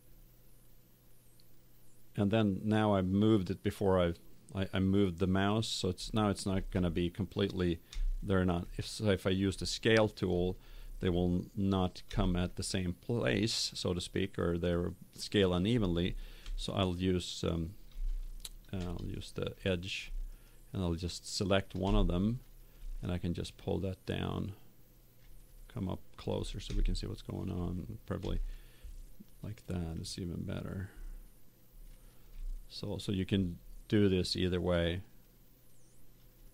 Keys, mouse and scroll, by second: 6.5 z, 7.9 middle click, 11.4-13.7 middle drag, 16.3 ctrl+Tab, 18.7 ctrl+Tab, 20.2-22.1 right drag, 22.3 middle click, 23.3-25.2 drag, 25.4-28.5 middle drag, 28.1 z, 29.9-31.5 drag, 32.8-34.1 right drag, 34.1 middle click, 34.7-35.8 drag.